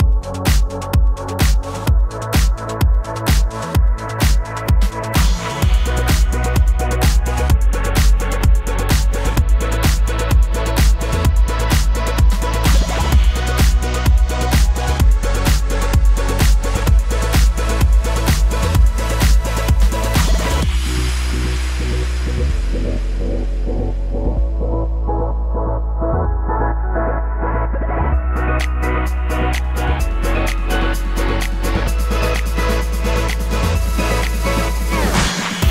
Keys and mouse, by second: 0.1-10.3 drag, 9.4 ctrl+shift+Tab, 10.3-12.4 shift+middle drag, 11.9 ctrl+Tab, 12.3-18.5 drag, 17.7 ctrl+Tab, 18.5-27.4 middle drag, 19.6 ctrl+j, 20.2 Tab, 20.4 1, 20.6 alt+z, 22.4 Tab, 23.1 Tab, 23.2 3, 23.6 alt+z, 23.6 l, 23.7 p, 23.9 Tab, 24.0 Tab, 24.2 Tab, 24.5 Tab, 24.7 alt+z, 24.8 click, 24.8 1, 25.2 q, 25.7 alt+z, 27.4 click, 27.6-31.1 shift+middle drag, 27.9 g, 29.0 g, 30.1 click, 30.2 g, 31.1 click, 31.2-35.7 shift+middle drag, 31.4 g, 32.8 g, 33.5 g, 34.7 g, 35.3 ctrl+g.